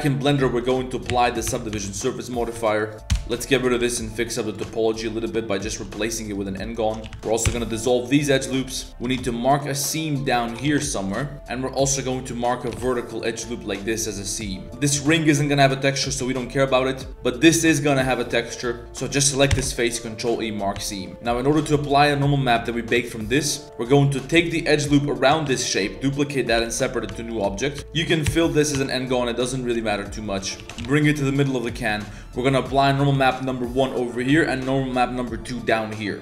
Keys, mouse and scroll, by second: 0.6 click, 1.1 ctrl+a, 1.4 Tab, 1.7 Tab, 2.0 click, 2.5 1, 2.8 click, 2.9 ctrl+KP_Add, 3.3 ctrl+KP_Add, 3.7 x, 4.7 shift+click, 5.5 alt+click, 6.0 alt+click, 6.3 alt+click, 6.6 alt+click, 7.2 shift+drag, 7.4 x, 8.5 drag, 9.0 2, 9.5 alt+click, 9.9 alt+click, 10.2 alt+click, 10.6 ctrl+e, 11.3 z, 11.7 click, 12.1 click, 12.7 ctrl+e, 14.3 click, 14.6 click, 14.6 3, 14.6 a, 14.6 l, 15.9 middle drag, 16.2 shift+click, 17.7 shift+click, 18.3 click, 19.1 click, 19.5 ctrl+e, 20.7 Tab, 21.3 g, 21.4 drag, 21.7 drag, 22.2 drag, 22.9 Tab, 23.2 click, 23.5 click, 23.6 z, 23.7 drag, 24.5 alt+click, 25.4 shift+d, 26.5 p, 27.1 Tab, 27.7 Tab, 28.3 f, 28.7 Tab, 29.0 middle drag, 29.6 drag, 29.8 shift+middle click, 30.2 middle click, 30.6 g, 30.8 ctrl+z, 30.8 g, 31.5 drag, 31.7 shift+middle click, 31.9 middle drag, 32.8 drag, 33.2 shift+middle drag, 34.1 drag, 34.6 click, 34.8 drag.